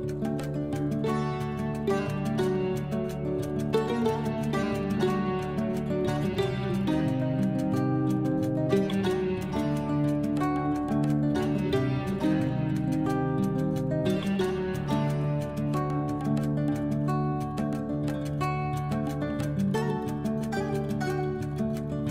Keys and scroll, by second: 15.6 Left.